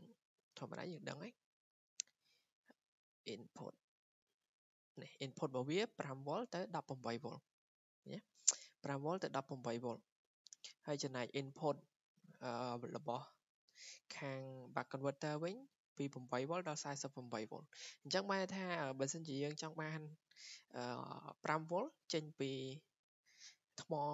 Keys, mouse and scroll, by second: 1.6 click, 4.9 click, 6.8 click, 8.5 click, 16.1 click, 16.5-20.8 drag.